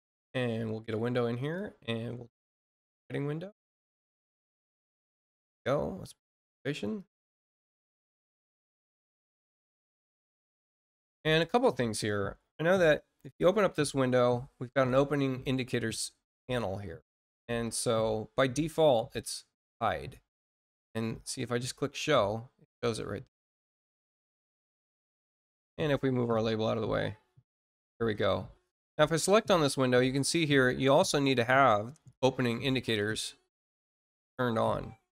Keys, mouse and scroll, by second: 1.3 click, 2.5 click, 3.9 click, 6.2 click, 6.9 click, 11.3 click, 14.9 click, 19.5 click, 22.2 click, 23.7 click, 26.2 click, 28.5 click, 32.7 click, 35.0 click.